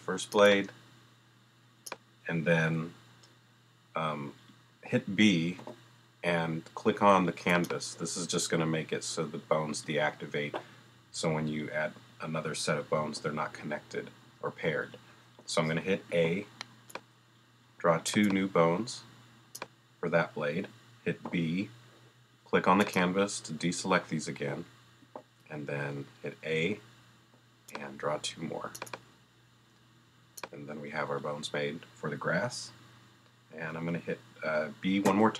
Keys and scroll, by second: 5.6 b, 16.1 a, 21.2 b, 25.0 a, 35.0 b.